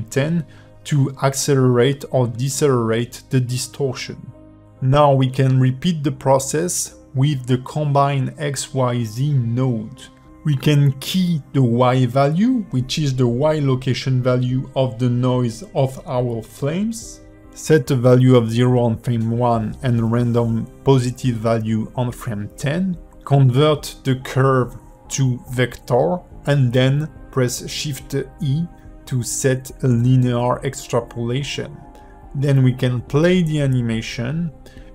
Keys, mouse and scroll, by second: 2.9 g, 8.1 space, 9.0 click, 10.3 shift+middle click, 12.2 shift+middle click, 12.8-13.6 scroll up 3, 15.1 i, 16.4 click, 18.2 click, 20.9 i, 21.9 click, 22.5 click, 23.6 shift+middle click, 25.3 click, 26.0 g, 27.7 click, 29.1 scroll up 2, 29.3 a, 30.4 v, 31.9 click, 32.1 click, 33.3 shift+e.